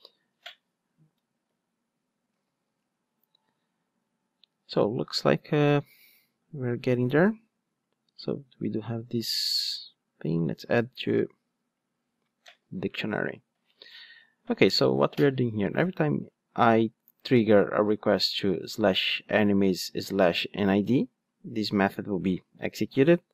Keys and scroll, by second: 2.8 Return.